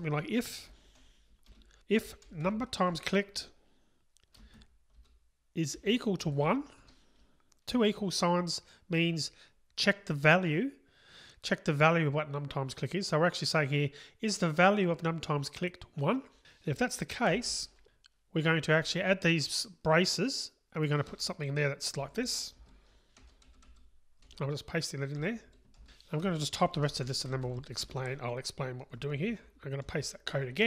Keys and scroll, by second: 3.1 Return, 24.2 super+x, 25.5 super+v, 25.8 Delete.